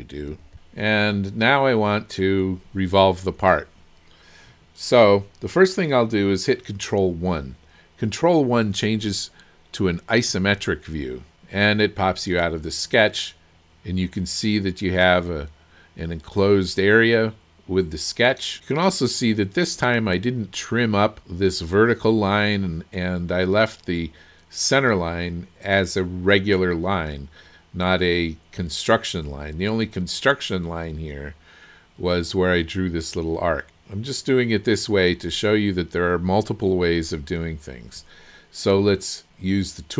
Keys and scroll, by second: 0.3 KP_2, 10.3 ctrl+1.